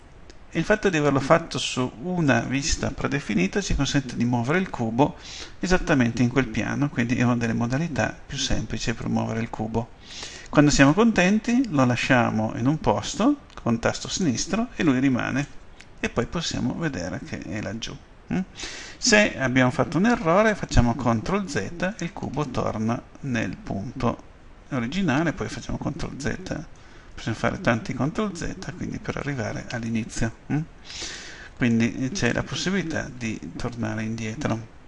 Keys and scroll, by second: 21.3 ctrl+z, 25.6 ctrl+z.